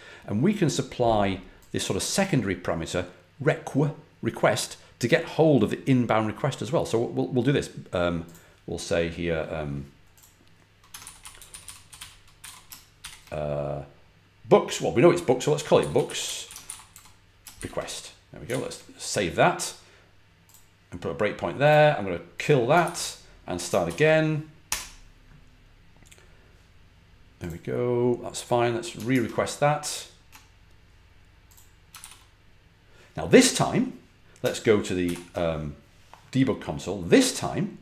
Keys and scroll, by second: 10.7-12.9 typing, 15.2-17.4 typing, 18.4 super+s, 22.7 ctrl+c, 23.8 ctrl+l, 24.6 F5, 29.0 super+Tab, 31.9 super+r, 34.9 shift+super+y.